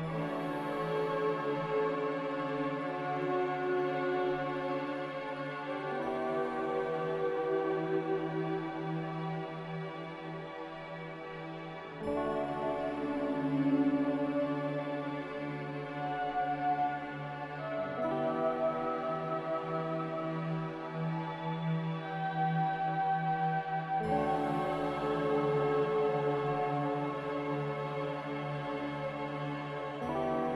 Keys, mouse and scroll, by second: 3.1 x, 4.8-6.0 typing, 8.4-10.1 typing, 12.3-13.8 typing, 15.2-17.6 typing, 19.3-20.2 typing, 21.4 z, 23.1-23.9 typing, 26.0 typing, 28.1 z.